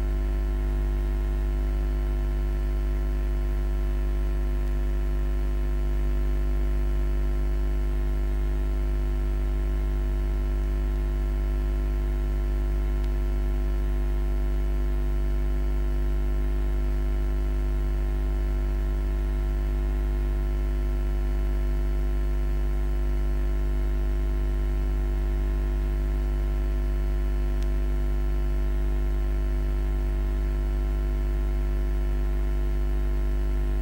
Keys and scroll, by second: 6.1-7.0 typing.